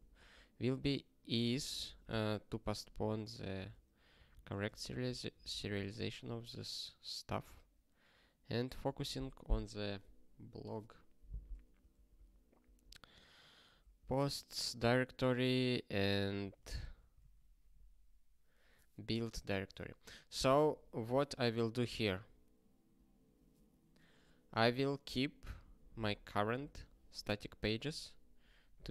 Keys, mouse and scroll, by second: 0.0 ctrl+space, 0.3 ctrl+n, 1.3 ctrl+alt+@, 2.1 ctrl+g, 3.2 ctrl+alt+@, 3.6 alt+;, 4.1 ctrl+s, 5.3 click, 5.8 ctrl+space, 5.9 ctrl+p, 6.2 alt+;, 6.8 ctrl+/, 7.1 ctrl+p, 7.6 ctrl+n, 8.4 ctrl+a, 8.9 ctrl+alt+@, 9.3 alt+;, 9.7 ctrl+s, 10.7 scroll up 1, 12.6 click, 16.0 ctrl+p, 16.3 ctrl+p, 19.0 ctrl+b, 19.6-21.4 typing.